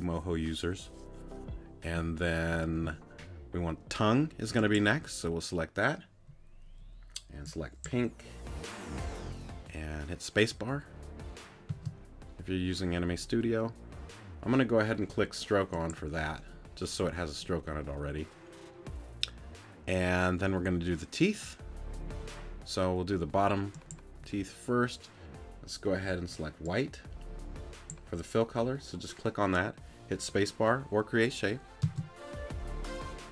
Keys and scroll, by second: 11.7 space, 31.8 space.